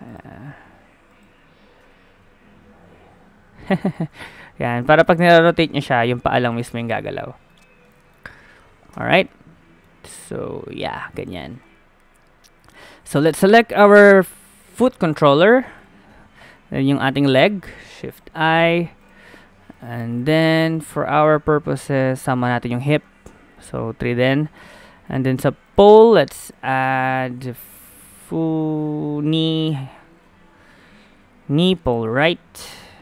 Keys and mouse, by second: 0.4 ctrl+z, 1.1-3.5 drag, 1.8 r, 4.1 ctrl+z, 4.8 click, 5.7 r, 6.7 ctrl+z, 8.9 Tab, 10.1 r, 11.2 middle click, 11.4 ctrl+z, 13.2 middle click, 14.3 middle click, 14.9 middle click, 15.8-17.5 drag, 17.8 shift+i, 19.0-20.6 drag, 20.6-22.5 middle drag, 24.2-28.1 middle drag, 28.1 click, 32.3-33.0 middle drag.